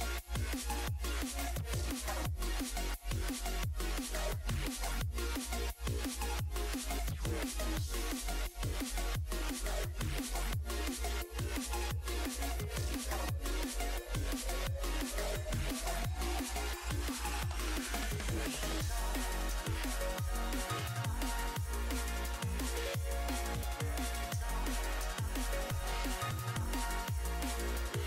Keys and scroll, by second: 9.6 s, 10.6 s, 15.4 ctrl+z.